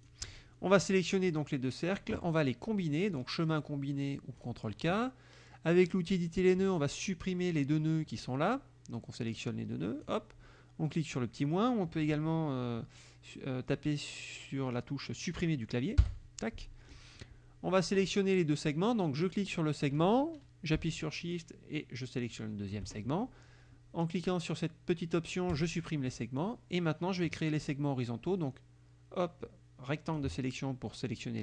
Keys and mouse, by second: 0.0 shift+click, 1.3 click, 3.2 click, 4.4 click, 5.9 click, 6.8 click, 9.4 click, 16.1 Delete, 19.3 click, 22.2 shift+click, 25.6 click, 26.4 click, 28.3-30.4 drag.